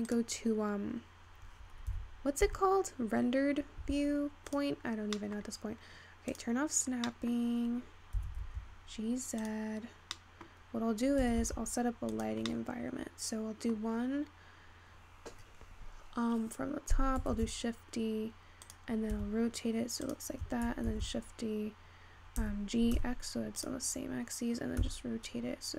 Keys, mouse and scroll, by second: 1.0-1.9 scroll up 4, 1.9-3.0 scroll up 1, 3.0 g, 5.9 middle click, 6.5 click, 7.5-9.1 scroll up 2, 9.1 g, 10.9-12.5 middle drag, 12.5 g, 13.6-14.9 middle drag, 14.9-16.6 scroll up 1, 18.4 shift+d, 19.8 r, 21.2 shift+d, 24.9 r.